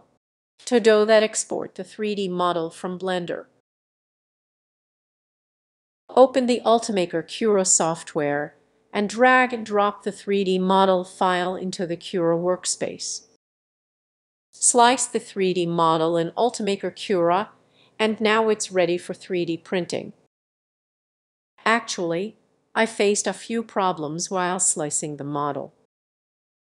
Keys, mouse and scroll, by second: 9.1-14.1 middle drag, 9.1-14.1 scroll down 1, 14.1-14.4 scroll down 5, 14.4 middle click, 14.9-15.8 scroll up 1, 15.8-20.7 scroll down 1, 20.7-21.3 scroll down 1, 22.8-24.3 scroll up 10, 24.3-26.7 drag.